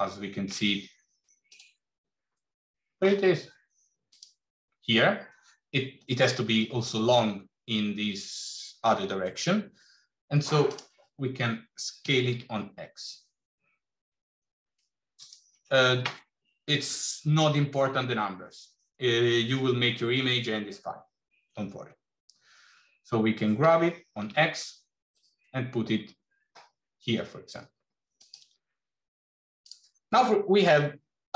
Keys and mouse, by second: 1.3 click, 2.2 middle click, 4.0 click, 11.9 s, 23.7 g.